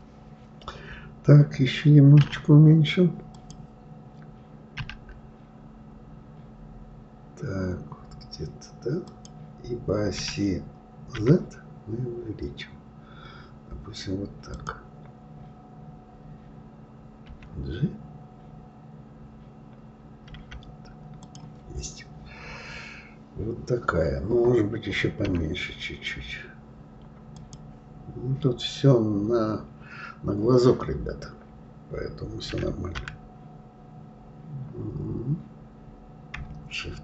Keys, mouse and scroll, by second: 3.3 click, 4.8 s, 22.6 scroll down 3, 23.6-25.3 scroll up 1, 25.3 s.